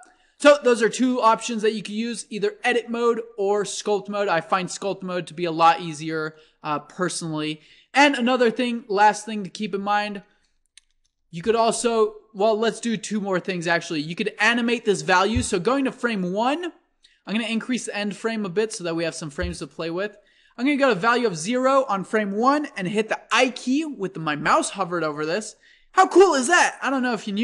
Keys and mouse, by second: 0.0-1.7 drag, 5.6 Tab, 6.2 Tab, 11.0 shift+Left, 13.5-15.2 drag, 17.9-19.6 drag, 20.4-22.3 drag, 24.4 i.